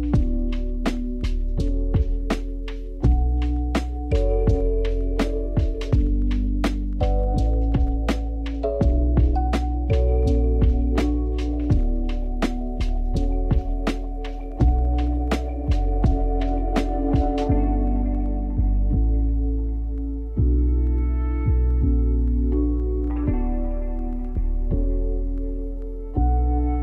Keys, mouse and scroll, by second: 3.8 s, 5.6 Tab, 6.0 a, 6.8 s, 8.7 g, 12.2 r, 12.9 g, 14.8 click, 15.3-15.7 scroll up 1, 15.7 g, 16.8-17.2 scroll up 2, 17.2 s, 18.5 r, 19.6 g, 22.4 click, 24.2-24.6 scroll down 1, 24.6 Tab, 24.9 click, 25.4-26.8 scroll down 1.